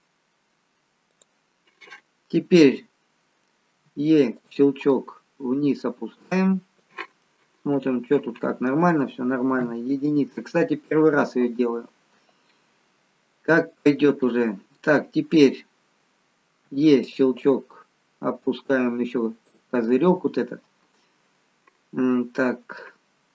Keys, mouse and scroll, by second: 3.8 e, 4.9 click, 7.2 middle click, 9.5 KP_1, 12.7-15.5 scroll up 1, 16.6 e, 17.4 click.